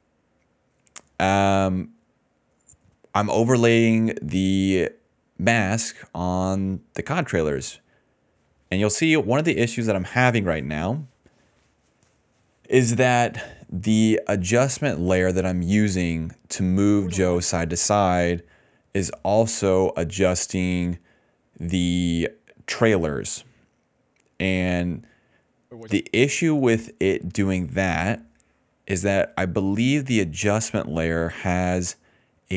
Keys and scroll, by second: 1.2 ctrl+z, 1.9 d, 2.0 d, 2.1 d, 5.7 s, 5.8 s, 5.9 s, 6.6 d, 14.2 i, 15.6 s, 16.4 d, 16.6 ctrl+s, 16.8 space, 17.4 space, 20.2-23.4 typing, 25.1 d, 25.5 space, 25.8 space.